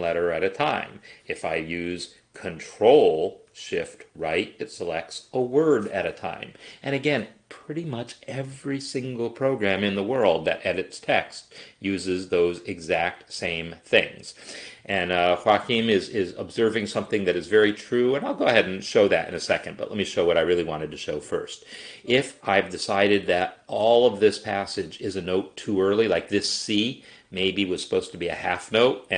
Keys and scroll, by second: 0.1 shift+Right, 4.3 ctrl+shift+Right, 5.5 ctrl+shift+Right.